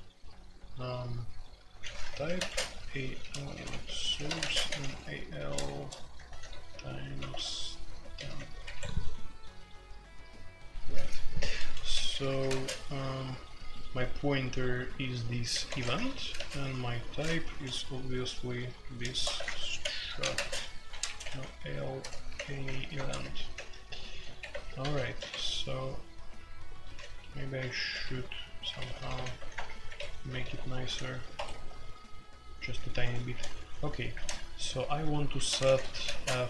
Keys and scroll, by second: 1.8-9.1 typing, 11.8-12.5 typing, 15.5-17.4 typing, 19.1-33.3 typing, 31.3 Escape, 34.1 Return, 35.1-36.1 typing.